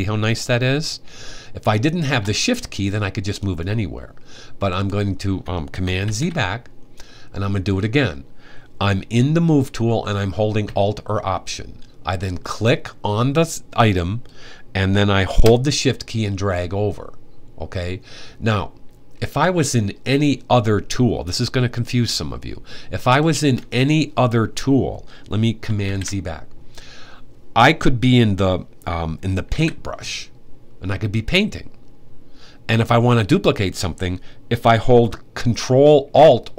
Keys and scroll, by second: 5.8 super+z, 25.6 super+z, 29.2 b.